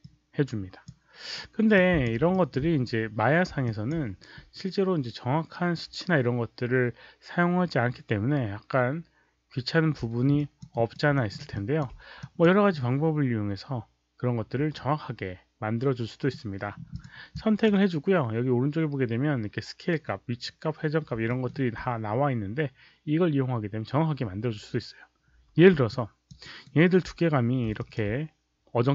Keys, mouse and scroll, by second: 1.7-2.0 drag, 2.3 alt+click, 3.6 alt+drag, 10.3 alt+drag, 10.6 alt+right click, 11.1 alt+middle click, 11.5 alt+click, 12.1 click, 16.8 click, 17.3 click, 21.2 alt+middle click, 25.8 alt+click, 26.3 alt+right click, 27.7 alt+click.